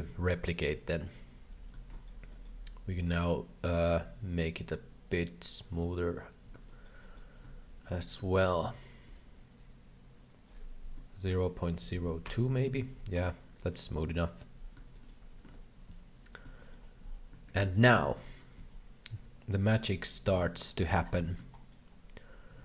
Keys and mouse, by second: 1.0 shift+middle click, 1.9 shift+middle click, 2.4 shift+middle click, 3.2-6.4 shift+drag, 6.6 shift+middle click, 7.1 shift+middle click, 8.6 shift+click, 9.6-12.8 drag, 13.5 shift+middle click, 15.0 shift+middle click, 15.5 alt+a, 15.9 b, 17.3 alt+a, 17.6 b, 18.2 shift+middle click, 19.5 b, 19.5 g, 21.2 alt+a, 21.6 shift+middle click, 22.5 shift+a.